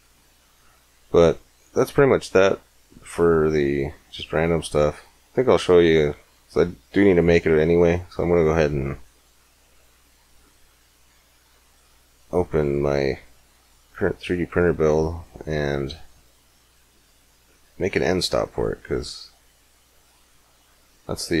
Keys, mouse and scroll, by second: 1.3-2.9 drag, 12.9-16.6 middle drag, 17.1 middle click, 19.1 middle click, 19.9-21.4 middle drag.